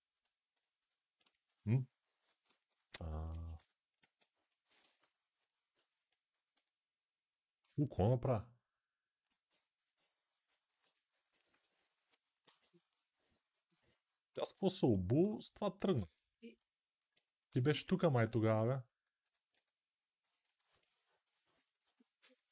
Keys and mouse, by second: 0.9-4.2 drag, 2.2 alt+q, 3.3 g, 3.7 alt+q, 6.3 g, 9.3-22.5 drag.